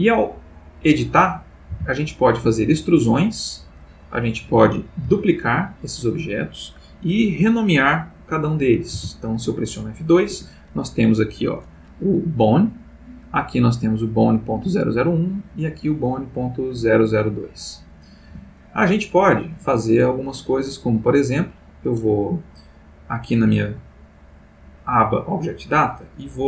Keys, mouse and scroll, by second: 0.9 click, 1.7 e, 2.7 click, 4.0 click, 5.0 shift+d, 6.2 click, 8.9 F2, 10.3 Escape, 10.7 click, 13.2 click, 15.4 click, 18.2 x, 18.5 click, 19.1 click, 19.5 x, 20.0 click, 21.2 click, 23.3 click.